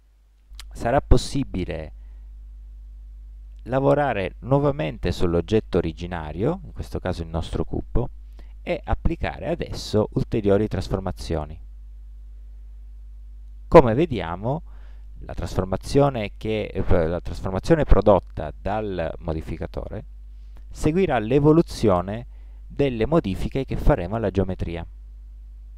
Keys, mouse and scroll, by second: 5.0-6.8 middle drag, 9.2-11.1 drag, 11.1 middle click, 11.3 middle click, 11.6-15.2 middle drag, 20.6 middle click, 20.7-22.2 middle drag, 22.8-25.2 middle drag.